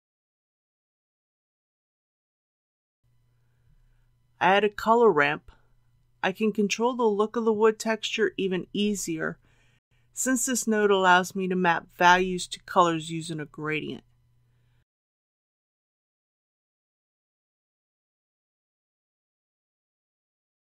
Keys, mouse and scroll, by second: 4.1 shift+a, 8.0-20.1 drag.